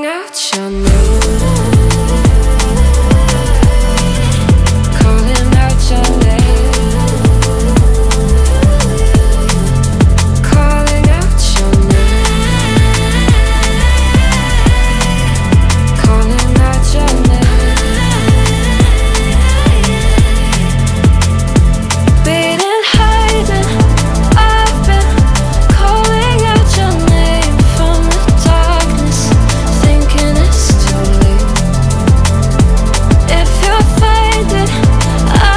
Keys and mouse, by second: 0.0-0.3 ctrl+middle drag, 0.8 shift+middle drag, 4.5 middle click, 5.8 shift+z, 6.5 3, 6.8 click, 8.5 ctrl+middle click, 11.0 z, 13.7 click, 14.1 shift+z, 14.3 Tab, 14.9 ctrl+middle drag, 15.9 shift+click, 16.5 shift+click, 17.2 shift+click, 17.6 z, 18.7 click, 19.7 shift+click, 20.2 z, 23.3 x, 24.0 click, 25.1 click, 30.3 click, 30.6 x, 31.0 click, 31.6 click, 32.7 click, 34.2 ctrl+middle click, 35.1 shift+middle click.